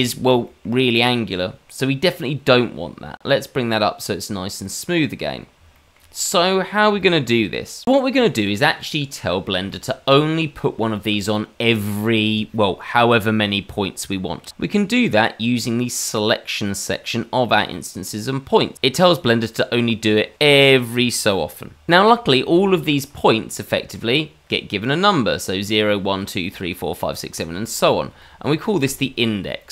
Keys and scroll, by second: 22.5 shift+z, 27.5 shift+z, 28.6 shift+a.